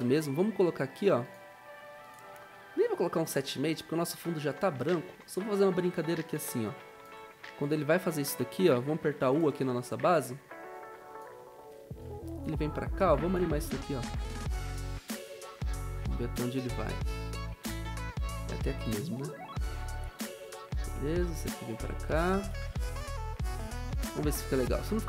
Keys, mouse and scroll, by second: 22.7 ctrl+z.